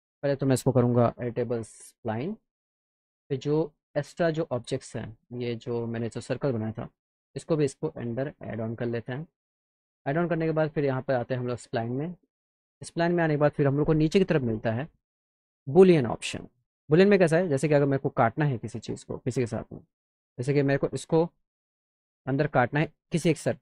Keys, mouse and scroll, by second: 0.2 click, 1.1 e, 1.9 click, 3.2 click, 3.3 scroll down 1, 4.6 click, 5.3 click, 5.7 click, 7.0 click, 9.5 click, 9.9-10.7 scroll down 2, 10.7 click, 11.4 click, 12.1 click, 19.3 click.